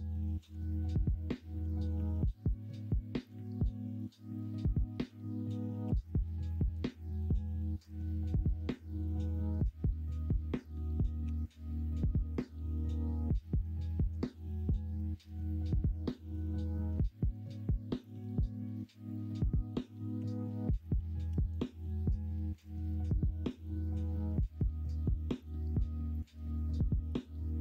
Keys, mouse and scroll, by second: 0.2 ctrl+z, 1.9 ctrl+r, 4.9 click, 5.8 ctrl+r, 11.2 3, 12.4-13.6 middle drag, 14.2 shift+d, 15.9 ctrl+z, 17.0 middle click, 20.1 y, 21.2 p, 22.2 middle click, 22.5 Tab, 25.6 middle click, 26.2 alt+z, 26.5-27.6 middle drag.